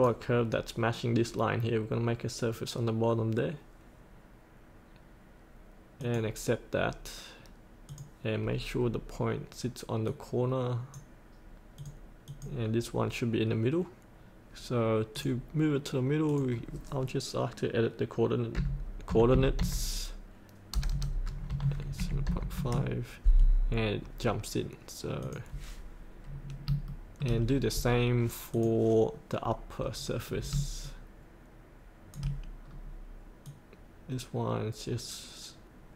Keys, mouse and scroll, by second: 8.8-9.2 scroll down 1, 10.1-16.2 drag, 18.5 KP_8, 21.9 KP_Decimal, 22.3 KP_5, 25.2 click, 26.3-26.7 scroll up 1, 26.9 shift+middle click, 28.5 click, 29.8-30.4 scroll down 1, 30.8 shift+click, 32.6 scroll down 1, 33.4-35.9 drag.